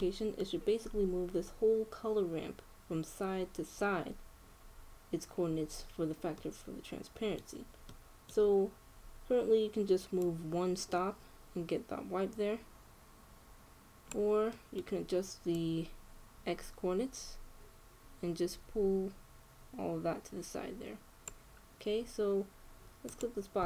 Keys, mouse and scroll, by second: 3.4 scroll down 1, 6.3 middle click, 9.9-10.9 middle drag, 10.9-12.7 drag, 15.2-17.1 middle drag, 16.2-18.1 drag.